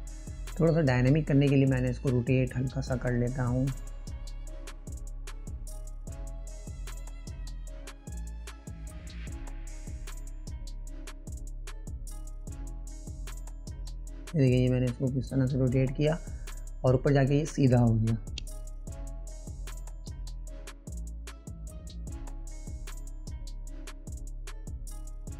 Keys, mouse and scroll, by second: 0.2-1.2 drag, 5.3 ctrl+z, 7.5 click, 9.4-12.8 drag, 13.7 click, 15.5-18.6 drag.